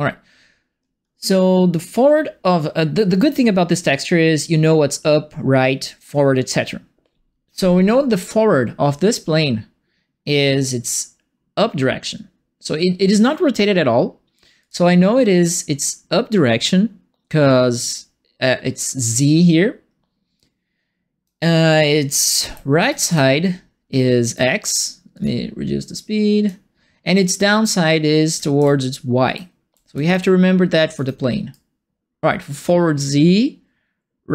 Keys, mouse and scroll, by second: 14.6 click, 20.3 right click, 21.7-24.3 right drag, 22.1-23.5 typing, 25.1 click, 25.9 click, 27.6-31.5 right drag, 28.0-30.9 typing.